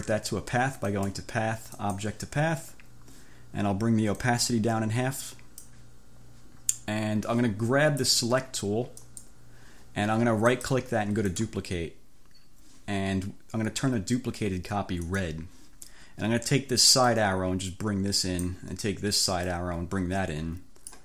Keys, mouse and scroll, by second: 1.0 click, 1.8 click, 4.3-5.9 drag, 9.1 click, 10.7 click, 11.3 click, 15.1 click, 17.2-18.7 drag, 19.6-21.0 drag.